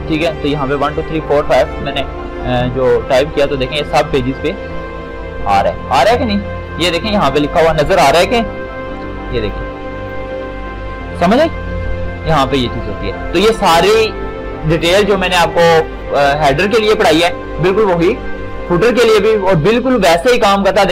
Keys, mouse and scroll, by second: 9.0 ctrl+shift+d, 19.4 shift+click.